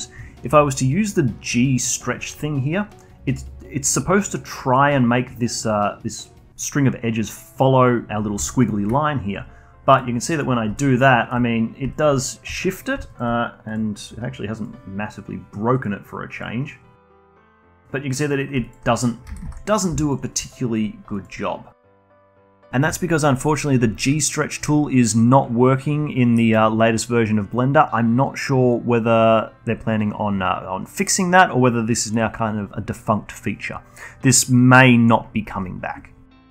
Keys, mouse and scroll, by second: 9.6-11.7 shift+right drag, 11.7 alt+click, 12.6 scroll up 1, 12.9-20.2 alt+drag, 20.2 ctrl+z, 20.4 ctrl+z, 20.8 scroll down 1, 21.0-22.2 alt+drag, 36.2-36.5 alt+middle drag.